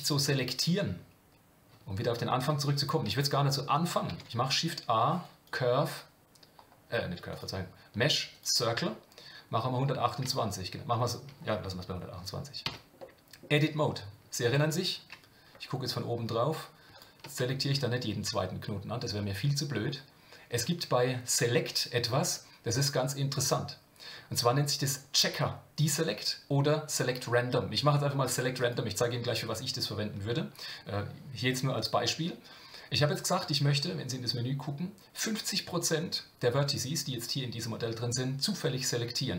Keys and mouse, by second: 4.1 shift+a, 12.7 Tab, 13.0 middle click, 14.6 KP_7, 20.7-28.7 drag.